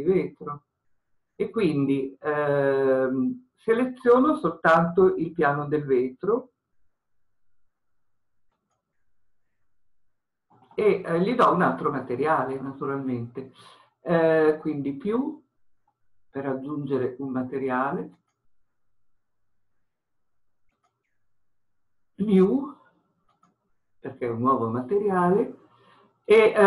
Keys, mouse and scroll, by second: 18.3-20.8 drag, 23.5-26.6 drag.